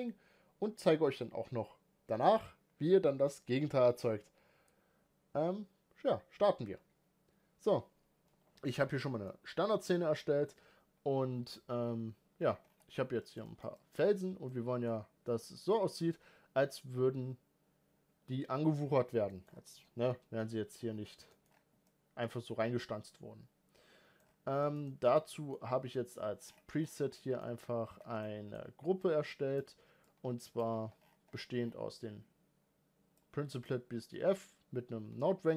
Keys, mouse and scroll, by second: 1.1-1.9 middle drag, 1.9 alt+a, 2.5-3.7 middle drag, 3.7 click, 4.9 g, 9.3-12.7 middle drag, 12.7-13.2 scroll down 3, 13.2-14.0 shift+middle drag, 14.0-14.5 scroll up 5, 14.5-14.9 middle drag, 14.9-15.3 scroll up 1, 15.3-15.8 shift+middle drag, 15.8 scroll up 1, 15.9-18.8 middle drag, 18.8-19.3 scroll down 10, 19.3 middle click, 19.4-19.7 scroll up 5, 20.9 scroll down 3, 21.1-21.5 shift+middle drag, 21.5 scroll up 1, 21.8-24.2 middle drag, 24.2-24.6 scroll up 1, 24.6-25.6 shift+middle drag, 25.6-29.0 scroll down 2, 29.0-35.5 drag.